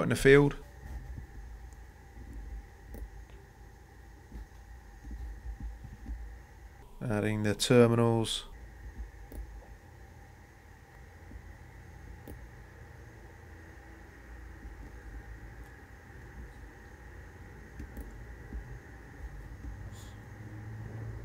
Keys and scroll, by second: 2.2 c, 2.7 Return, 4.1 Escape, 11.6 g, 11.9 Return, 14.5 Escape, 19.1 c, 19.3 Return, 20.5 Return, 20.5 c.